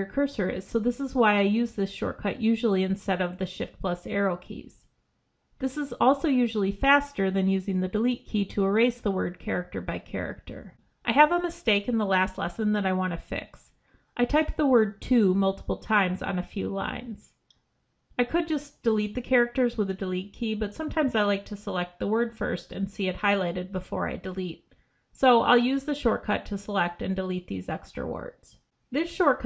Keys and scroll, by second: 5.9 ctrl+b, 13.8 ctrl+shift+Left, 23.4 ctrl+b, 27.0 ctrl+b.